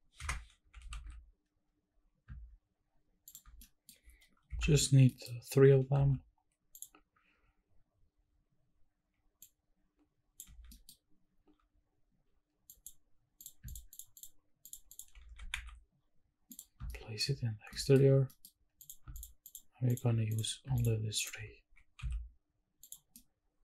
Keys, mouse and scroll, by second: 0.2 Escape, 0.6 g, 1.0 shift+z, 3.3 shift+click, 3.6 middle click, 4.5 KP_Decimal, 5.1 middle drag, 5.6 g, 6.1 shift+z, 6.8 click, 9.4-10.4 ctrl+drag, 10.6 scroll down 1, 10.7 middle drag, 12.7 drag, 13.6 shift+drag, 13.9 shift+drag, 14.2 shift+drag, 14.6 shift+click, 14.9 shift+click, 15.3 g, 15.5 x, 16.5 click, 16.9 shift+middle drag, 17.5 scroll down 1, 17.7 shift+middle drag, 18.3 middle drag, 18.8 click, 19.5 shift+click, 20.3 click, 20.8 shift+click, 21.1 shift+click, 21.6 g, 22.0 z, 22.8 click, 23.1-23.6 middle drag.